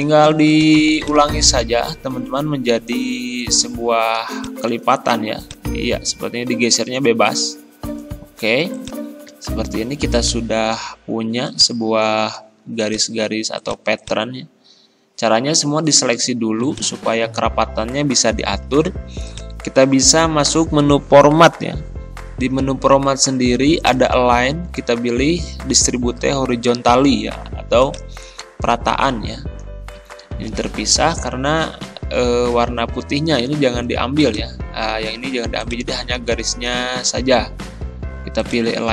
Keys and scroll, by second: 30.6 ctrl+z, 37.1 ctrl+z.